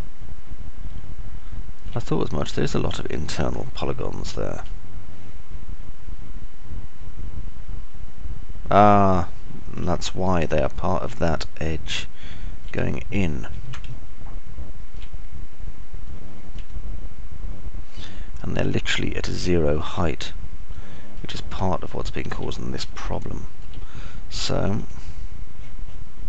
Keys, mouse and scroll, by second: 0.0 alt+click, 0.0 alt+middle click, 0.0 alt+right click, 2.0-3.5 alt+middle drag, 2.5-3.5 alt+drag, 2.5-3.5 alt+right drag, 6.3-7.3 alt+drag, 6.3-7.3 alt+middle drag, 6.3-7.3 alt+right drag, 10.5 alt+middle click, 12.0 middle click, 12.3-14.3 alt+middle drag, 13.5 alt+click, 13.5 alt+right click, 15.5-16.5 alt+drag, 15.5-16.5 alt+middle drag, 15.5-16.5 alt+right drag, 18.3-21.5 alt+drag, 18.3-21.5 alt+middle drag, 18.3-21.5 alt+right drag, 23.0-24.0 alt+middle drag, 24.1-25.3 middle drag.